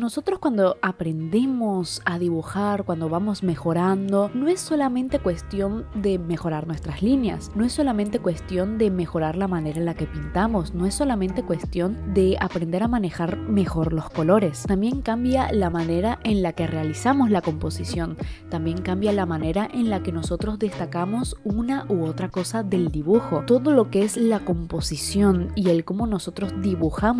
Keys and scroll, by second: 1.0 i, 4.7 i, 9.4 ctrl+z, 20.1 e, 22.8 i, 23.5 ctrl+z, 23.9 ctrl+z, 24.1-27.1 typing.